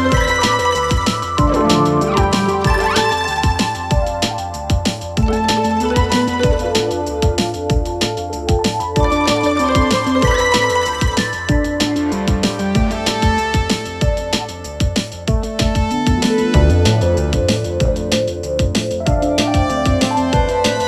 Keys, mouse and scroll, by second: 1.9 alt+], 2.7-7.7 click, 9.6 m, 10.4 click, 11.3 Return, 13.7 click, 15.2-17.5 click, 20.1 z, 20.4-20.8 click.